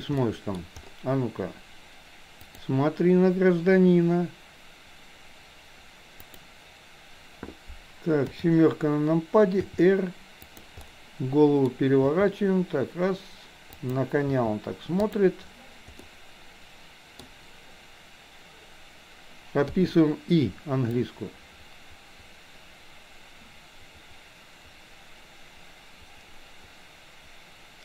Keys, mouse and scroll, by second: 0.3 middle click, 2.4 click, 6.2 click, 8.3 KP_7, 9.7 r, 10.8-11.7 middle drag, 12.0 r, 14.3 r, 16.0-17.3 middle drag, 19.8 i, 21.0-27.8 drag.